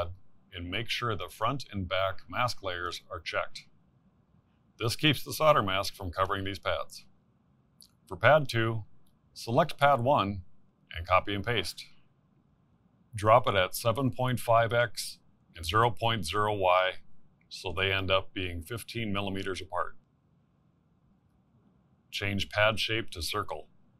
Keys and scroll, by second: 10.3 ctrl+c, 10.8 ctrl+v.